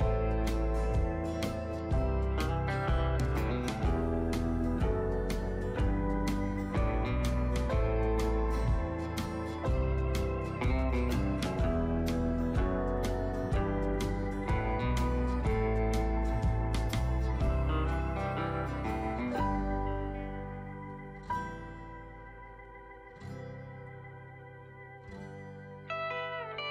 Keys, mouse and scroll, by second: 25.7 shift+click, 26.5 right click.